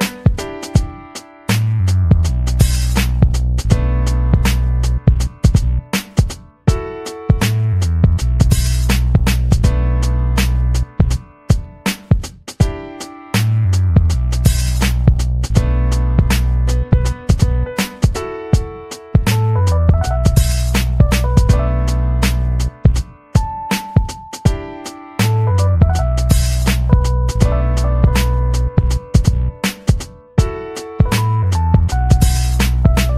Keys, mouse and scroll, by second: 0.9 click, 1.0 right click, 2.0 click, 3.7 click, 5.0 click, 6.0 click, 7.1 click, 8.0 click, 8.8 click, 9.6 click, 11.7 click, 13.8 click, 15.2 click, 19.8 click, 24.1 ctrl+scroll up 2, 24.6-25.4 ctrl+scroll down 4, 29.7 click, 30.2-33.1 drag.